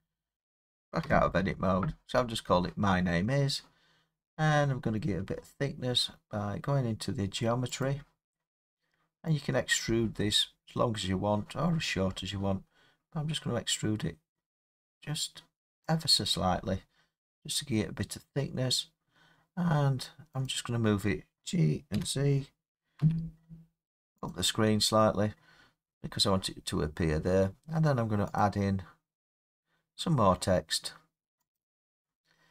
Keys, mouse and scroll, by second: 0.3 Return, 1.0 Tab, 4.1 scroll up 1, 4.2-4.9 scroll, 4.9 scroll up 3, 5.3 middle click, 6.1 middle click, 7.8 click, 15.8 click, 20.5 click, 21.9 g, 23.0 z, 24.3 click, 28.4 click, 31.6 click.